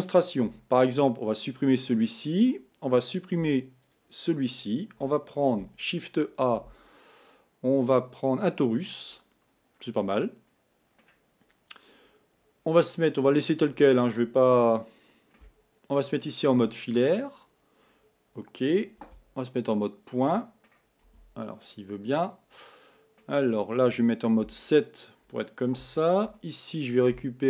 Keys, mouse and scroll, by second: 0.5 x, 2.5 click, 3.5 x, 5.5 shift+a, 10.4-12.0 middle drag, 12.0-13.3 scroll up 7, 13.3-14.7 scroll down 5, 14.7-16.7 shift+middle drag, 16.7 z, 18.0-19.1 scroll up 3, 19.1 1, 19.8-21.2 middle drag, 21.2 Tab, 21.8-24.6 middle drag, 24.6 KP_7, 25.9 a, 26.6 b.